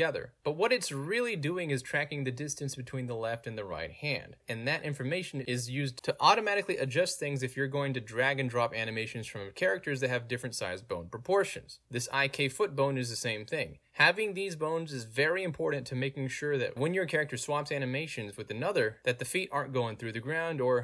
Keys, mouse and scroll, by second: 11.6 alt+middle click, 12.0 click, 12.8-14.7 drag, 15.0 ctrl+z, 15.6 click, 16.2-17.5 drag, 17.8 ctrl+z, 18.8 click.